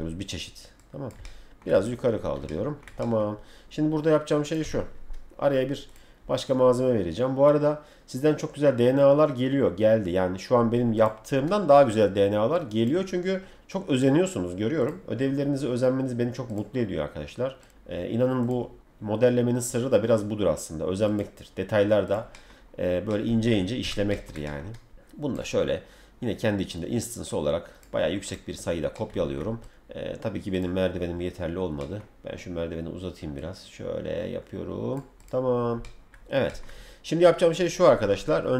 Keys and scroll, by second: 4.6 m, 23.8 w, 38.1 F3.